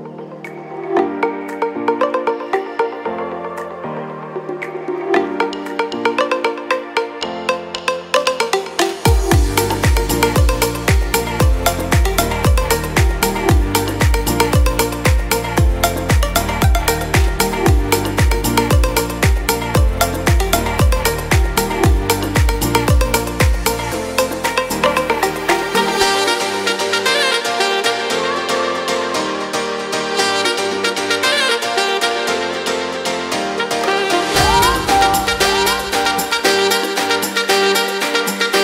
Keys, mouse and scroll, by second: 10.1 w, 12.3 ctrl+z, 16.0 alt+q, 20.3 F4, 25.7 u, 30.9 ctrl+a.